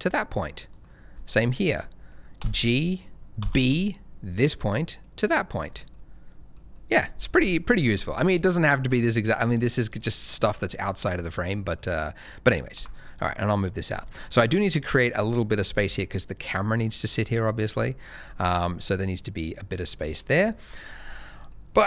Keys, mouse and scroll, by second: 0.4 middle click, 1.1 click, 1.5 middle click, 2.3 g, 3.4 b, 4.2 click, 5.9 middle click, 7.7 click, 8.0 shift+middle click, 8.5-8.9 scroll up 1, 8.9 middle click, 10.2-10.7 scroll down 1, 10.7 middle click, 12.7 g, 13.1 middle click, 13.8 click, 14.0 shift+middle click, 14.1-14.7 scroll up 3, 14.7 middle click, 15.8-16.8 scroll up 1, 16.8 middle click, 17.7 g, 17.8 middle click, 18.4-18.9 scroll down 1, 18.9 middle click, 20.4 shift+middle click, 20.7-21.2 shift+scroll up 2, 21.2 middle click, 21.6-21.8 scroll up 1.